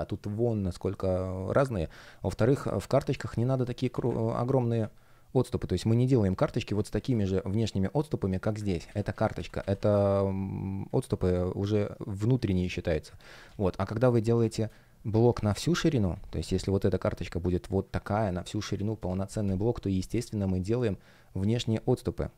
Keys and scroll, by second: 2.4 space, 4.1 super+z, 6.3 shift+p, 7.0 space, 8.6 super+z, 9.8 space, 11.7 shift+p, 13.1 super+z, 14.3 space, 18.9 Return.